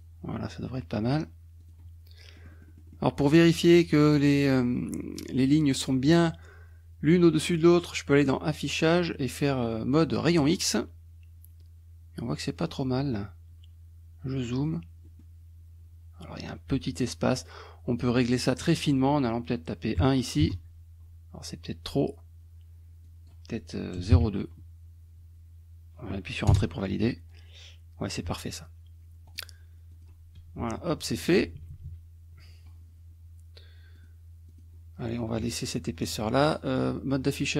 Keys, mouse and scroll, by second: 1.6 click, 2.4 middle click, 7.2 click, 10.5 click, 12.7 middle click, 14.7 click, 15.1 middle click, 18.6 click, 20.0 KP_1, 20.5 Return, 23.1 click, 24.1 KP_2, 26.5 Return, 29.3 click, 29.9 click, 30.7 KP_Subtract, 34.0 click, 34.5 click, 36.6 click.